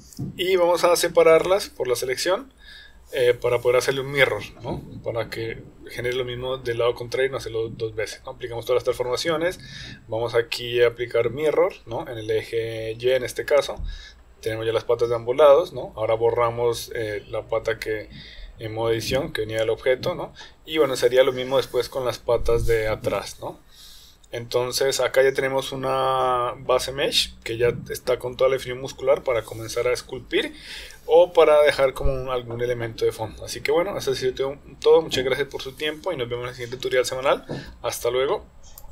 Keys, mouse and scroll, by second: 4.1 Tab, 5.1 click, 6.8 ctrl+a, 9.1 drag, 9.9-11.6 drag, 13.0 click, 14.4 click, 14.9-16.3 middle drag, 17.1 Tab, 17.8 click, 18.3 Tab, 18.8 click, 19.5 Tab, 21.4 l, 22.3 x, 24.4 Tab, 24.9-25.4 middle drag, 25.5 click, 26.2 middle click, 26.5 click, 27.0-30.7 middle drag, 31.6-32.0 middle drag, 33.2-33.7 middle drag, 34.1-34.6 shift+middle drag, 35.0 middle click, 36.4-37.1 shift+middle drag.